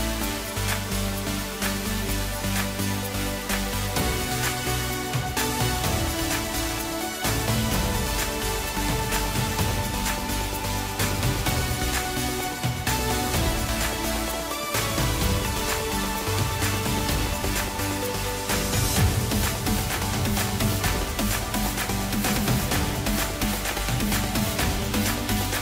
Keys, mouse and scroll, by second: 2.2 scroll down 2, 2.5-3.4 middle drag, 3.4 scroll down 4, 4.2 KP_3, 5.0 scroll down 2, 5.2-5.6 middle drag, 6.2 KP_1, 7.0-7.5 ctrl+KP_4, 8.4 scroll up 3, 9.4-11.9 middle drag, 11.9 click, 12.3-12.7 scroll up 3, 12.7-13.4 scroll down 3, 13.4 KP_Divide, 14.3-15.1 middle drag, 15.1-15.8 scroll up 6, 15.8 Tab, 16.8-17.3 drag, 17.9 x, 20.0 click, 20.2 click, 20.9-22.7 drag, 22.7 middle click, 23.2 scroll down 3, 23.5 middle click, 24.5 click, 24.8-25.3 scroll up 2, 25.3 middle click.